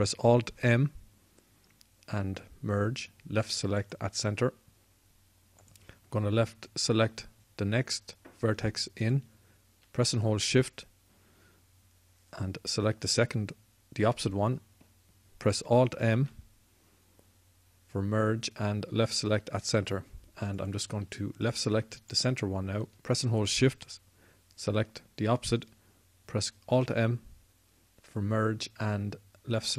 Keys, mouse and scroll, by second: 1.3 alt+m, 16.9 alt+m, 20.1 alt+m, 27.5 alt+m.